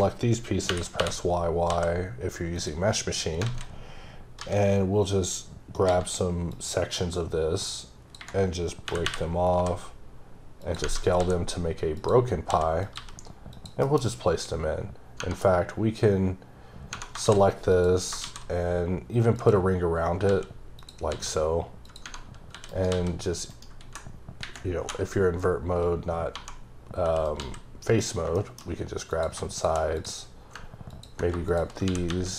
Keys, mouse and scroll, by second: 2.6 click, 3.4 alt+a, 4.7-5.1 scroll down 3, 5.1-5.8 scroll up 3, 5.8 c, 6.0-6.5 scroll down 2, 6.5 click, 8.2 ⦸, 10.6 click, 10.8 Tab, 12.0 click, 12.5 s, 12.8 click, 12.9 g, 13.5 click, 14.8-15.2 scroll up 1, 15.2 Tab, 16.9 Tab, 17.2 shift+s, 17.7 click, 18.2 shift+a, 19.3 click, 20.0 scroll down 2, 20.3 s, 20.8 click, 21.1 s, 21.9 click, 22.0 Tab, 22.7 right click, 22.9 s, 23.5 right click, 23.8 `, 25.6-26.3 scroll up 2, 26.3 1, 27.2 right click, 27.4 s, 28.0 click, 28.3 shift+middle click, 29.1 click, 31.9 e.